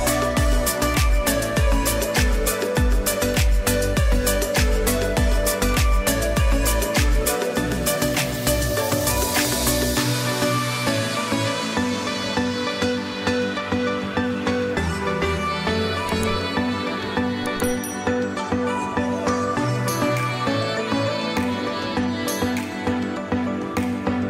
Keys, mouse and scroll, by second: 7.6 click, 10.0 click, 20.8 click.